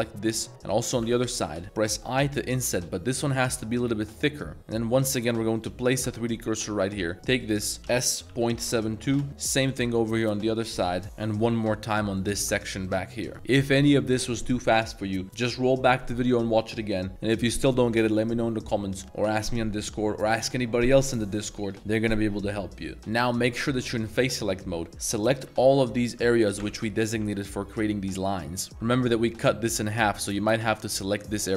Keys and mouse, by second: 0.1-0.7 middle drag, 1.0 l, 1.3 middle drag, 2.0 i, 4.6 1, 4.9 click, 5.6 shift+s, 7.4 shift+click, 8.6 7, 9.0 2, 9.1 Return, 9.4 click, 9.8 shift+s, 10.1 click, 10.5 shift+click, 10.9 s, 11.0 Return, 11.5-11.9 middle drag, 12.4 shift+s, 12.7 click, 13.3 shift+click, 13.3 a, 13.7 middle click, 14.1 middle drag, 15.3 middle click, 23.1 click, 24.0 middle click, 25.4-27.6 typing, 28.3-28.7 middle drag, 29.0 l, 29.6 l, 29.9-30.6 middle drag, 30.8 l, 31.4 l.